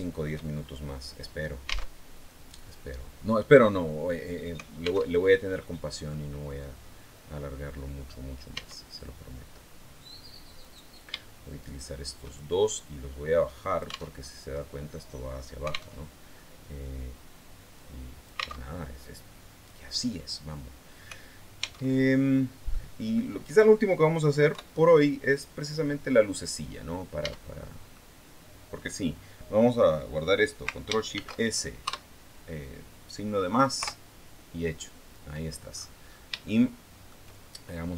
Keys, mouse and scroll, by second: 0.3-0.9 shift+scroll up 4, 1.2 scroll down 2, 1.7 alt+Tab, 4.9 alt+Tab, 5.4 middle click, 8.3 Tab, 10.4 right click, 11.4 shift+right click, 12.5-13.9 drag, 13.9 alt+Tab, 15.7 alt+Tab, 17.5 click, 18.4 alt+Tab, 20.2 scroll down 2, 21.6 alt+Tab, 22.1-22.5 scroll down 2, 22.5 middle click, 24.3 KP_3, 26.1-26.5 scroll down 2, 27.0 Tab, 27.5 scroll down 2, 30.9 ctrl+shift+s, 31.6 KP_Add, 33.6 KP_Enter, 34.8-35.4 scroll down 2, 35.4 scroll down 1, 35.5-36.1 scroll up 2, 36.1 shift+scroll up 1, 36.2 shift+middle click.